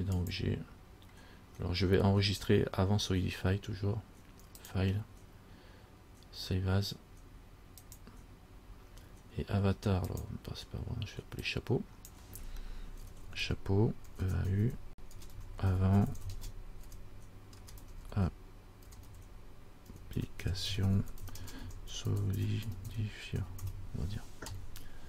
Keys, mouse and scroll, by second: 4.8 click.